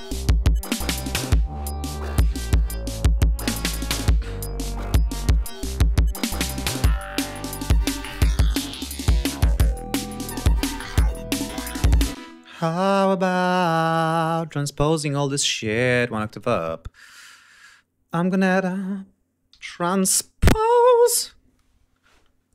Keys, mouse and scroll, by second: 3.9 scroll up 2, 4.4 scroll down 2, 4.7 ctrl+scroll up 2, 12.1 space, 13.0 ctrl+scroll down 2, 13.3 ctrl+scroll up 2, 13.5 ctrl+click, 14.0 ctrl+click, 14.7 right click, 15.4 click, 16.3 right click, 18.0 click, 19.2-20.4 typing.